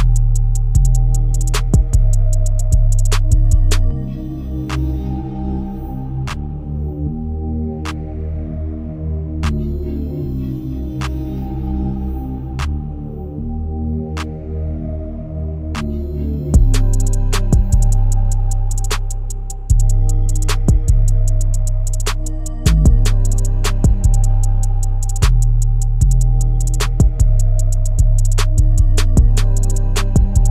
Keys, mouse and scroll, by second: 6.2 click, 6.8-7.4 scroll down 1, 7.5 KP_1, 8.1-8.4 scroll down 1, 8.4-9.1 shift+middle drag, 9.1 shift+a, 11.3 g, 15.0 s, 17.2 shift+middle click, 17.6-18.3 scroll up 13, 18.3 shift+middle click, 18.7-21.3 scroll up 5, 21.3-22.8 scroll down 14, 22.8-23.7 scroll down 10, 23.7-24.1 shift+middle drag, 24.1-24.5 scroll up 7, 24.5 shift+middle click, 25.9-26.4 scroll up 5, 26.4-27.4 scroll down 20, 27.4-28.0 shift+middle drag, 28.0 scroll up 1, 28.3-28.7 shift+middle drag, 28.7-29.6 scroll down 1, 29.6-30.5 scroll down 2.